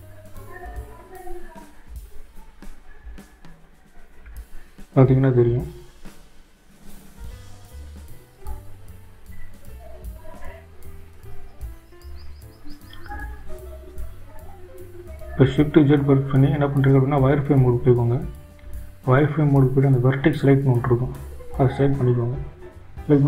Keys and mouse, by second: 3.7-6.6 drag, 15.8 shift+z, 22.9 click.